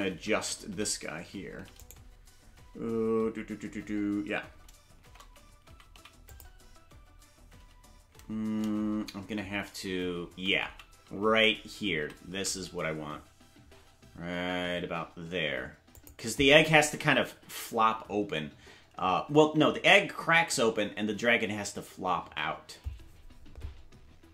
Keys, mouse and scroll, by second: 5.0 shift+`, 8.6 shift+`.